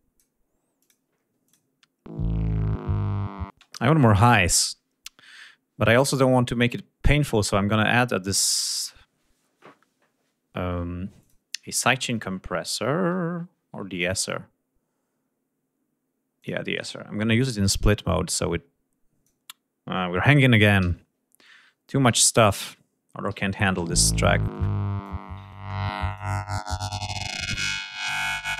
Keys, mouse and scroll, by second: 0.3 click, 0.9 click, 10.7 click, 15.9 click, 17.8 click, 20.3 ctrl+s, 21.6 g, 21.9 click, 23.3 l, 24.0-24.8 drag, 25.6 click, 26.2 click, 27.4 click.